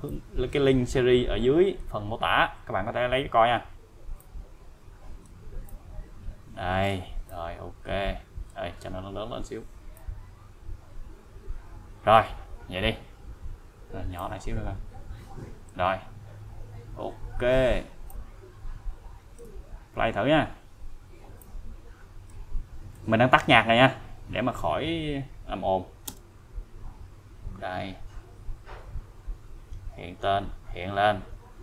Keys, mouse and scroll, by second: 4.2-5.5 click, 10.0-12.5 click, 14.2-15.8 click, 18.1-19.7 click, 19.6 scroll down 1, 21.4-21.7 scroll down 1, 21.7-22.3 click, 26.1 space.